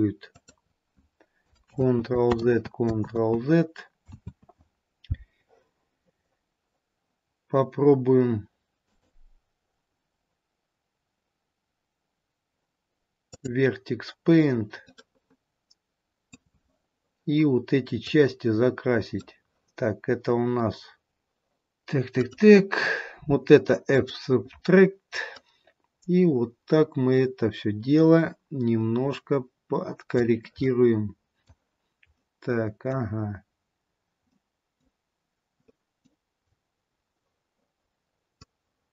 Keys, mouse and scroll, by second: 1.6 ctrl+click, 2.0 ctrl+z, 2.9 ctrl+z, 4.5 ctrl+z, 8.8 click, 14.5 scroll up 1, 15.0 middle click, 18.3 click, 21.2 click, 22.2 click, 25.7 click, 30.8 middle click, 32.3 middle click, 36.8 middle click, 36.8-38.6 scroll up 3, 38.6 click.